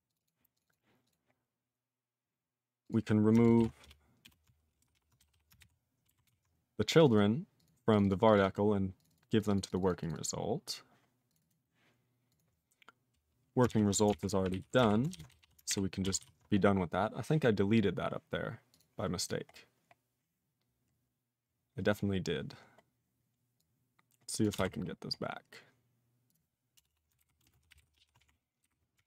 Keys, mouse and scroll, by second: 0.1 click, 0.1 click, 0.2 double click, 0.3 double click, 0.5 click, 0.6 click, 0.6 double click, 0.7 double click, 1.0 click, 1.1 click, 1.3 scroll down 3, 2.8 click, 2.9 click, 3.6 ctrl+>, 3.9 BackSpace, 4.2 BackSpace, 4.8 ctrl+p, 5.2 /, 5.3 /, 5.6 ctrl+g, 6.3 ctrl+s, 6.5-7.0 scroll down 1, 7.0 click, 7.0 click, 7.1 double click, 7.1 double click, 7.6 click, 7.6 click, 7.9 click, 8.0 click, 8.0 double click, 8.1 double click, 8.3 click, 8.3 click, 8.3 double click, 8.4 double click, 8.6 scroll down 2, 9.0 click, 9.0 click, 9.1 double click, 9.1 double click, 9.4 click, 9.4 click, 9.5 double click, 9.6 double click, 9.7 click, 9.7 click, 9.8 double click, 9.9 double click, 10.0 click, 10.1 click, 10.1 double click, 10.2 double click, 11.3 click, 11.3 click, 11.4 double click, 11.5 double click, 12.3 click, 12.4 click, 13.7 ctrl+a, 14.1 alt+f, 14.5 alt+b, 15.1 ctrl+>, 15.3 /, 15.4 /, 15.7 ctrl+g, 16.3 ctrl+s, 17.0-17.9 scroll up 11, 18.7 click, 18.8 click, 19.2 click, 19.3 click, 19.5-20.4 scroll down 8, 20.4-21.7 scroll down 6, 22.8-23.6 scroll down 4, 23.6 click, 24.4 click, 24.6 alt+w, 24.7-26.1 scroll up 13, 26.3 click, 26.3 click, 26.8 Return, 26.9 Return, 27.2 ctrl+y, 27.4 ctrl+space, 27.5 ctrl+a, 27.5 ctrl+p, 27.7 Tab, 27.8 ctrl+n, 27.9 ctrl+p, 28.2 alt+f, 28.7 alt+b, 29.0 alt+f.